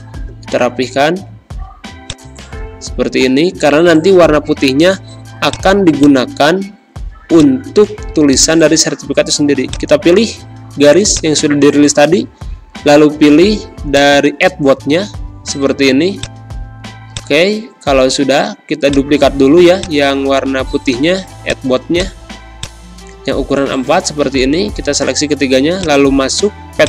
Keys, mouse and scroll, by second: 5.7 space, 5.9 click, 6.2 space, 7.3 click, 9.6 shift+click, 13.8-16.1 drag, 23.7 ctrl+z, 25.8 click.